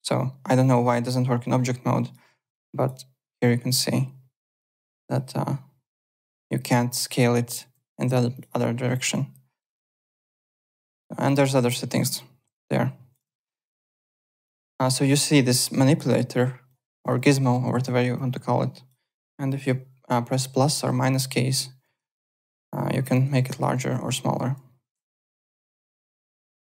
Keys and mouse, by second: 2.4 ctrl+z, 2.7 click, 3.3 click, 7.6 ctrl+z, 8.3 click, 8.9 click, 10.2 click, 12.1 click, 13.2 alt+Tab, 13.7 alt+click, 14.5 w, 14.8 click, 16.6 click, 17.7 ctrl+z, 18.1 click, 19.8 =, 20.2 -, 20.6 =, 21.0 -, 21.8 KP_Add, 22.1 KP_Subtract, 22.3 KP_Add, 22.6 KP_Subtract, 22.9 KP_Add, 23.5 KP_Subtract, 24.4 KP_Add, 25.4 alt+Tab, 25.9 alt+click.